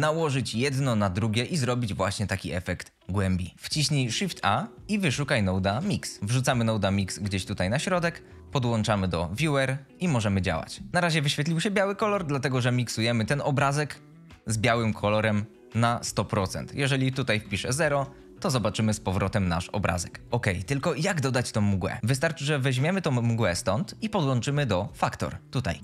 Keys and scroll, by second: 3.5 Escape, 4.3 shift+a, 4.7 Return, 5.5 m, 5.8 x, 6.1 Return, 17.6 KP_0, 17.7 Insert, 17.8 Return.